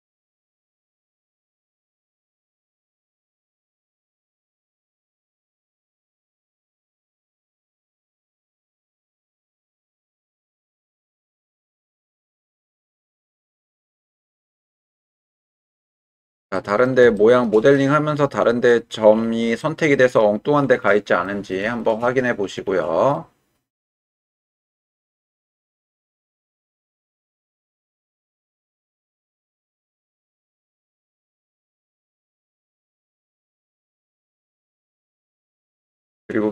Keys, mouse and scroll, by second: 1.9 shift+click, 2.3 middle click, 3.3 2, 4.5 shift+click, 5.4 f, 6.2 click, 7.2 f, 8.2 click, 9.1 Tab, 9.9-10.2 middle drag, 12.3 click, 13.5-13.8 shift+middle drag, 14.2-15.8 middle drag, 16.5 middle drag, 17.1 shift+middle drag, 17.7-18.7 middle drag, 19.6-20.1 middle drag, 21.2 middle drag, 21.8 shift+middle drag, 23.2-25.4 middle drag, 25.9 shift+middle click, 26.5 middle drag, 26.7-27.2 drag, 27.2 middle click, 27.6-27.9 shift+middle drag, 28.1-28.5 middle drag, 28.8-29.2 shift+middle drag, 29.6-30.7 middle drag, 31.0 shift+middle drag, 31.5-32.1 middle drag, 32.5 shift+middle drag, 33.0-34.5 middle drag, 34.9 shift+middle drag, 35.9-36.2 shift+middle drag.